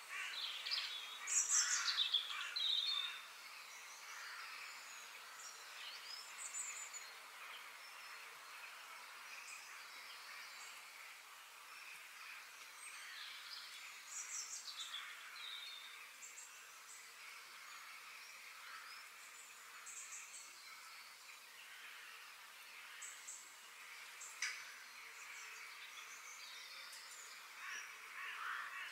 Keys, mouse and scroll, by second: 2.7-4.7 middle drag, 8.1 middle click, 8.7 f, 10.5-11.4 scroll up 3, 11.6 scroll down 2, 11.8-13.7 middle drag, 23.8 KP_3, 24.6-25.5 scroll up 5, 25.5 shift+middle click, 26.3-27.1 scroll up 5, 27.1-28.9 shift+middle drag.